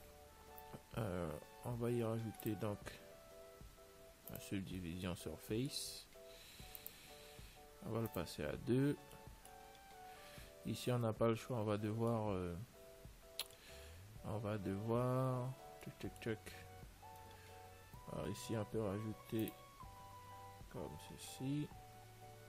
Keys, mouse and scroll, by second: 2.7 click, 7.1-10.2 drag, 10.1 middle click, 11.0 Tab, 12.4-14.4 middle drag, 16.1-18.8 middle drag, 19.3 ctrl+r.